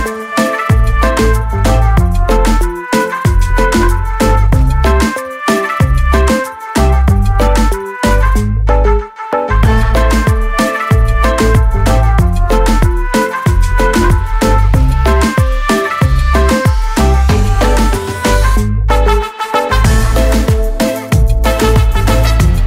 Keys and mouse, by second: 0.0-0.1 typing, 1.7 click, 7.5 click, 8.5 click, 8.9 click, 11.3 click, 12.1 click, 14.2 click, 21.2 BackSpace, 21.4 Left, 21.5 Left.